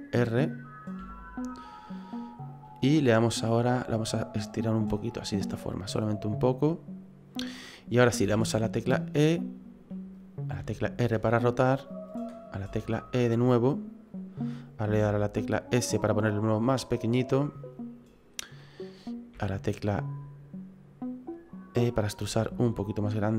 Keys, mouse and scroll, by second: 1.0 r, 4.1 click, 8.2 e, 10.6 r, 12.7 e, 14.9 s, 16.8 click, 19.3 e, 22.3 s.